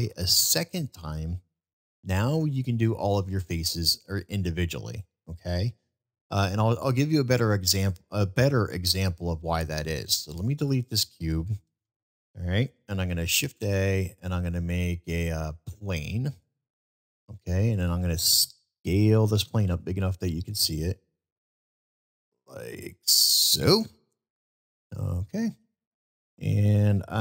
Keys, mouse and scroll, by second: 5.6-6.2 middle drag, 6.8-7.2 middle drag, 7.4 middle drag, 11.9 Delete, 11.9 Delete, 13.4 a, 17.9-18.3 middle drag, 24.1 middle drag, 25.6 middle click.